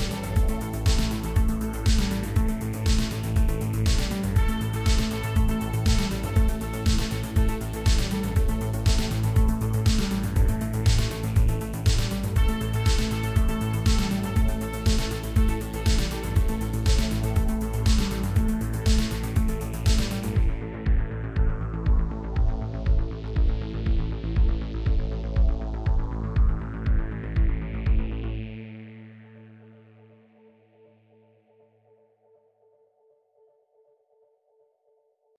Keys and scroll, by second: 7.3 g, 7.8 x, 14.5 Tab, 15.2 ctrl+a, 16.8-17.8 typing, 18.5 Return, 19.2 h, 19.3 a, 19.9 l, 21.1 Tab, 25.3 ., 25.5 6, 25.8 Return, 27.7 ., 28.0 7, 28.4 Return.